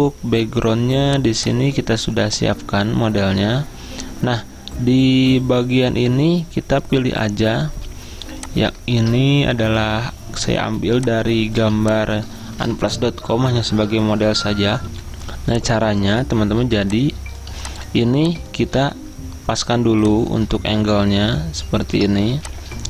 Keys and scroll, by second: 9.2 alt+Tab, 10.8 z, 14.3 typing, 15.5 F10, 17.7 typing, 18.8 v.